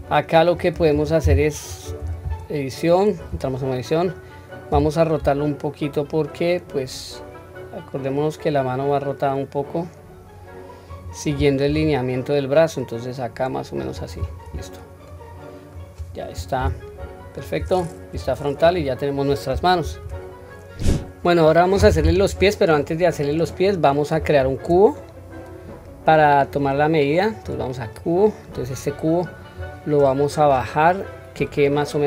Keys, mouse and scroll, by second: 0.1-0.5 shift+middle drag, 0.1-0.4 scroll up 1, 2.0 Tab, 4.7 r, 14.5 scroll down 1, 15.1-15.9 middle drag, 16.6 Tab, 17.0 scroll down 1, 17.4 middle click, 18.1 KP_1, 18.6 click, 19.9 ctrl+s, 23.3 click, 24.4 shift+a, 29.6 click.